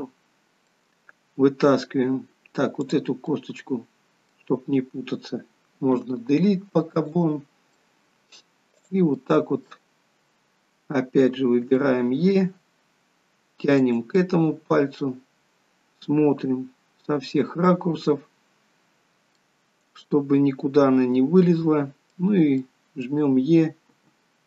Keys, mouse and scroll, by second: 0.1 middle click, 3.1 click, 3.5 middle click, 6.2 Delete, 8.0 middle click, 9.0 click, 9.4 middle click, 11.9 e, 14.4 middle click, 19.7 middle click, 22.9 middle click, 24.1 e.